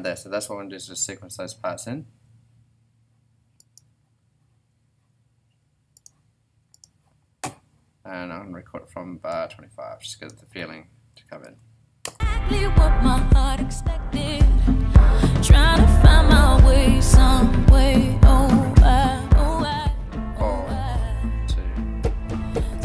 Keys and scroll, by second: 11.1 •, 12.0 r.